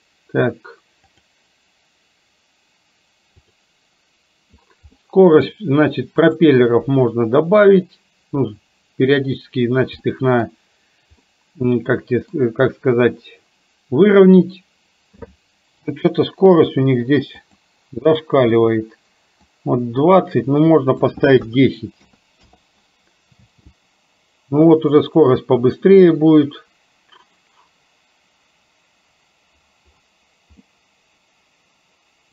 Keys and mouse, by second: 1.2 click, 3.4 click, 5.0 middle click, 6.4 click, 10.1 middle click, 11.3-12.4 middle drag, 16.0 n, 17.5-22.6 drag, 23.5 space, 30.7-32.3 middle drag.